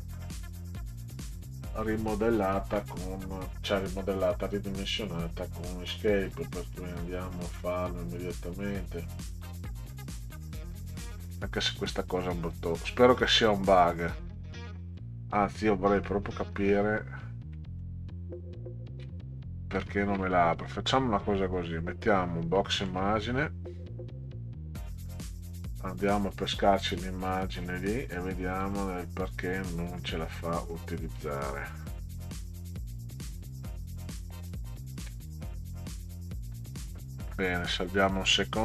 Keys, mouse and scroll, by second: 0.8 click, 4.2 right click, 10.9 click, 14.5 middle click, 17.6 middle click, 18.3 ctrl+Up, 18.8 ctrl+Up, 19.8 ctrl+scroll up 2, 22.1 click, 22.6 middle click, 23.4 click, 25.1 click, 25.3 click, 27.1 click, 27.6 click, 28.1 click, 28.6 click, 30.0 click, 30.6 click, 31.1 click, 32.3 click, 34.5 click, 38.2 click.